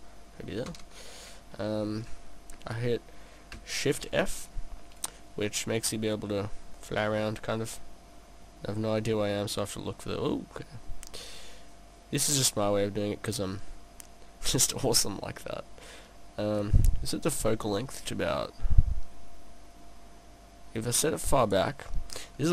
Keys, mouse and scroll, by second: 0.1 click, 0.7 KP_0, 4.0 shift+f, 14.6 click, 18.2 click, 22.2-22.5 scroll down 3.